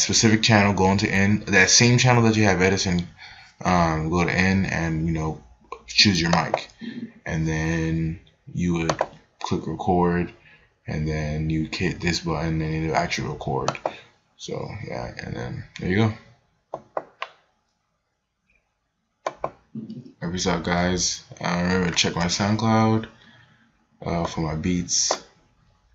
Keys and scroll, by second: 15.6 space.